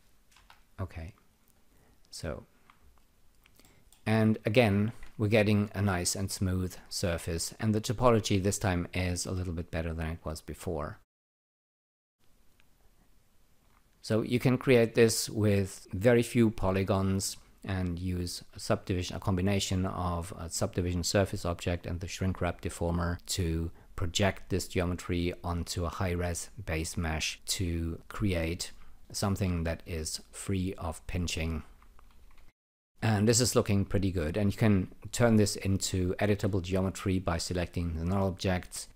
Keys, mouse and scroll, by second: 0.3 Delete, 1.5 alt+right click, 2.0 alt+click, 3.6 alt+middle click, 4.2 alt+click, 5.0 ctrl+r, 7.0 alt+click, 10.9 alt+right click, 11.5 alt+middle click, 12.0 alt+click, 27.3-28.8 alt+drag, 30.3-31.8 alt+drag, 32.3 ctrl+r, 33.6 scroll up 2, 33.9 alt+click, 37.5 click, 38.5 right click.